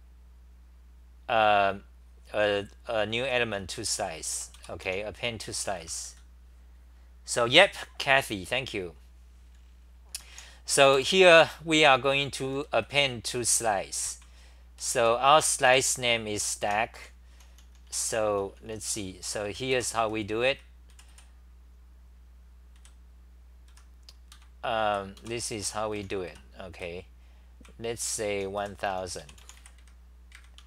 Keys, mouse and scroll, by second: 2.4-8.6 typing, 4.3 Return, 10.1-16.7 typing, 10.9 Return, 18.7-21.0 typing, 22.6-23.7 typing, 24.3 ctrl+g, 24.9-30.6 typing.